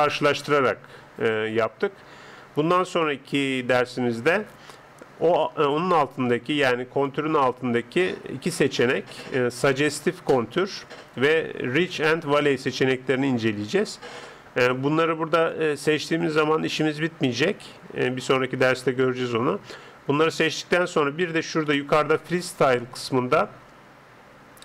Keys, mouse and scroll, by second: 6.2 click, 15.4-17.7 drag, 22.2 click.